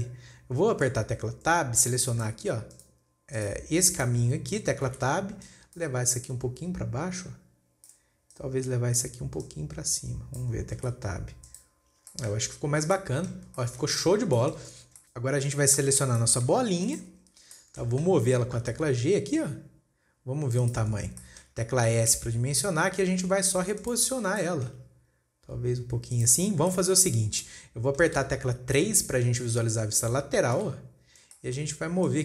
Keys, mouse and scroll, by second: 0.2 scroll up 2, 0.7 scroll up 1, 1.3-1.9 scroll down 2, 1.9-2.5 scroll up 4, 2.5 click, 3.1 click, 3.8 click, 4.4 click, 5.1 scroll down 4, 5.4 Tab, 5.9 click, 6.7 click, 8.8 click, 9.9 click, 11.3 Tab, 11.5-11.9 scroll down 2, 11.9 click, 12.5-13.1 shift+middle drag, 13.1 scroll down 1, 13.4-15.2 shift+middle drag, 15.2 scroll up 3, 15.4-16.4 shift+middle drag, 16.4 click, 17.0-17.4 scroll down 2, 17.4 scroll up 3, 17.7-18.0 scroll down 3, 18.0-19.2 shift+middle drag, 19.2 g, 21.4-22.5 scroll up 7, 21.7 shift+middle click, 22.5 s, 24.6 scroll down 2, 24.8-25.4 shift+middle drag, 25.4-25.9 scroll up 1, 25.9 s, 26.9-27.8 scroll down 6, 27.1-27.5 shift+middle drag, 27.9-31.0 middle drag, 31.0 KP_3, 31.5 scroll up 2, 31.8-32.2 shift+middle drag.